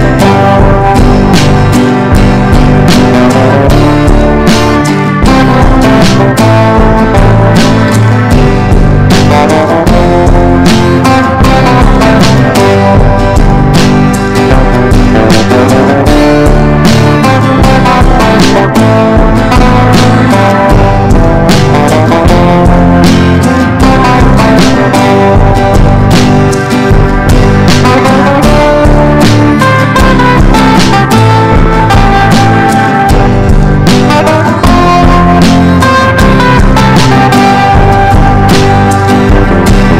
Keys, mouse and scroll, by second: 1.0 ctrl+d, 1.4 click, 7.3 Up, 7.6 Left, 8.0 Up, 8.8 click, 9.6 shift+click, 10.6 ctrl+g, 11.3 ctrl+d, 11.6 click, 16.6 click, 17.5 ctrl+d, 17.8 click, 23.6 click, 24.9 click, 26.2 click, 27.5 click, 28.7 click, 30.1 click.